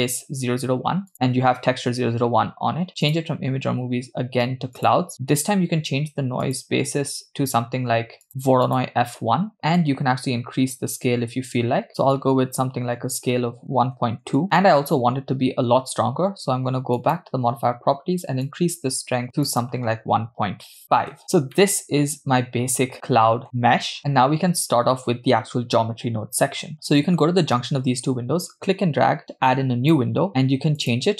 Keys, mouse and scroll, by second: 3.0-5.1 drag, 6.5-7.2 drag, 8.3 click, 9.8 scroll down 2, 9.8-14.4 drag, 17.0 click, 18.5 click, 19.5-21.2 drag, 21.6-23.4 middle drag, 24.0-25.2 middle drag, 28.5-30.0 drag, 30.8-31.1 drag.